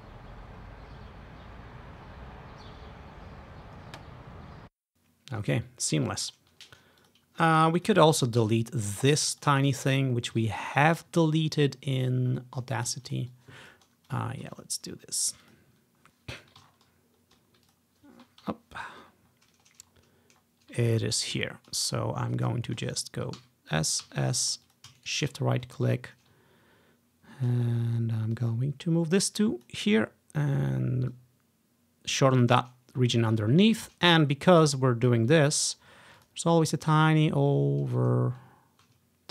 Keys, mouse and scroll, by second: 1.0-1.8 ctrl+scroll up 3, 1.9 scroll up 1, 4.6 alt+d, 4.9-6.1 ctrl+scroll down 1, 6.3-7.1 scroll up 1, 7.1-9.7 drag, 8.5 s, 9.3 s, 9.7 shift+middle click, 10.1 ctrl+scroll down 1, 10.1 ctrl+middle click, 10.2-12.4 ctrl+drag, 13.2-17.1 drag, 14.5 \, 15.3 Delete, 15.8 Delete, 16.8-17.8 ctrl+scroll up 1, 17.8-19.2 drag, 18.7 Delete, 19.2-19.9 ctrl+scroll down 1, 19.9 scroll up 2, 20.5 scroll down 1, 21.3-22.4 ctrl+drag, 21.7-23.7 ctrl+scroll up 7, 23.1 click, 23.5 s, 23.8 click, 24.2 s, 24.5 ctrl+scroll down 1, 24.5 ctrl+click, 26.0 click, 26.6 ctrl+click, 27.0 ctrl+scroll down 1, 27.2 ctrl+scroll up 1, 28.5-29.8 drag, 31.2-33.7 drag, 33.2 ctrl+scroll up 1, 34.2-35.2 drag, 36.3 click, 38.3 ctrl+scroll down 1.